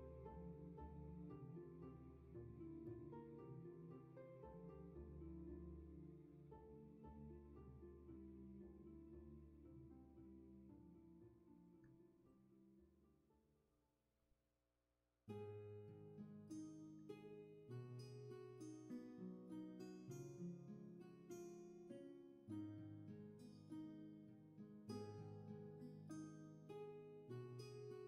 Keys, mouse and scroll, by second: 15.0 ctrl+z, 16.7 ctrl+z, 24.6 ctrl+z.